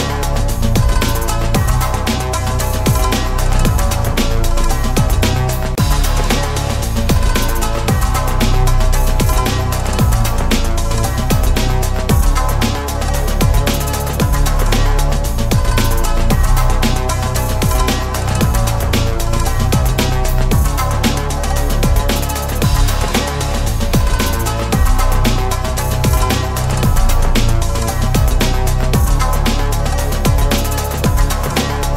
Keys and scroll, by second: 11.5 ctrl+BackSpace.